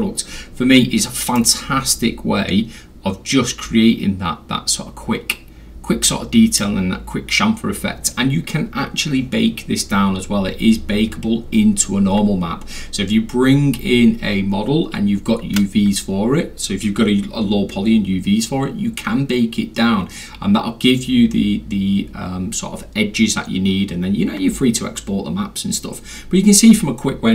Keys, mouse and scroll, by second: 1.4-6.6 drag.